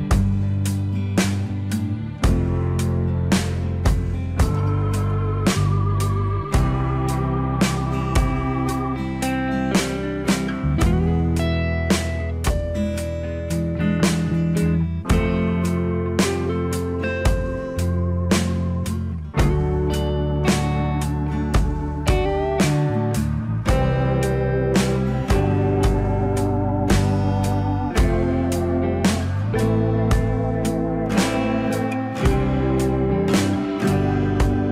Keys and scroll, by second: 10.1 alt+x, 25.6 ctrl+z.